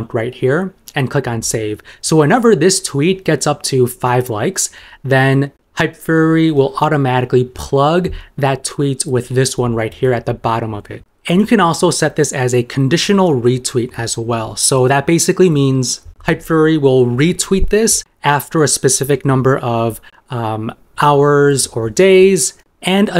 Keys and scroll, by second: 9.2 super+m.